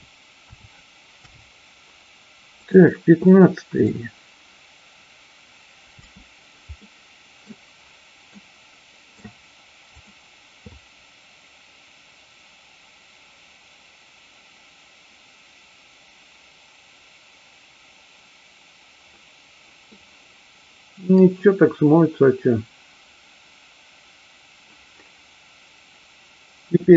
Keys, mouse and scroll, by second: 1.2 i, 2.7 click, 3.2-3.8 middle drag, 6.0 space, 6.7-7.4 middle drag, 8.3-9.1 middle drag, 9.8 click, 19.8-21.1 middle drag.